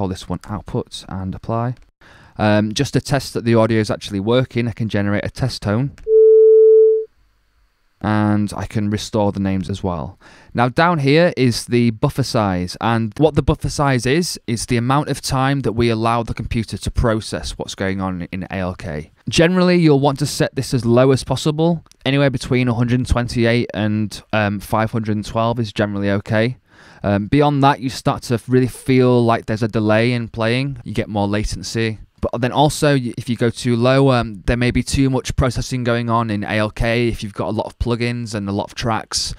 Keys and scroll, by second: 0.0-0.3 typing, 0.5 Return.